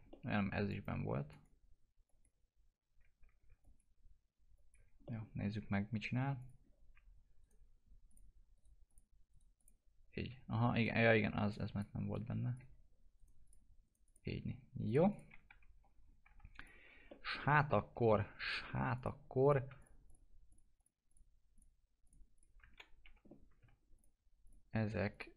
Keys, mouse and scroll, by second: 0.6 ctrl+click, 3.6 ctrl+click, 5.0 middle click, 6.4 click, 7.4 right click, 8.0 click, 8.5 right click, 8.8 click, 9.3 right click, 9.5 click, 10.7 right click, 11.5 alt+click, 13.1 right click, 13.4 click, 13.8 right click, 14.0 click, 15.4 F4, 16.5 click, 17.1 alt+middle click, 18.4 click, 23.0 F4, 23.9 ctrl+click.